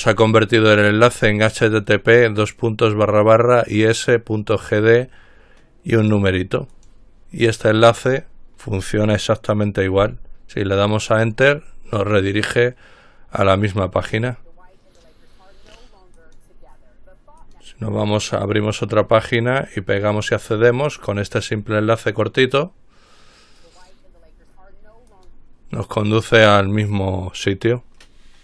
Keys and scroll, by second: 10.3 Return.